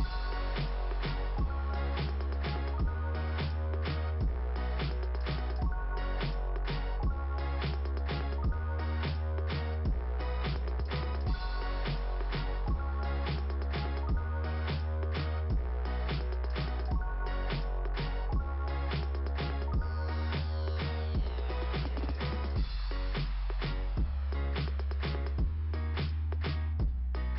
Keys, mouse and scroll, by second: 0.0 click, 0.0 click, 1.8 click, 3.1 click, 3.6 click, 3.8 click, 6.7 scroll up 2, 8.2 click, 9.6 scroll up 2, 10.6-11.4 scroll up 1, 13.4 scroll up 2, 14.7 scroll down 2, 16.3 ,, 16.7 click, 17.2 right click, 18.4 click, 19.2 right click, 20.6 click, 21.4 scroll down 2, 26.1 click, 26.2 click.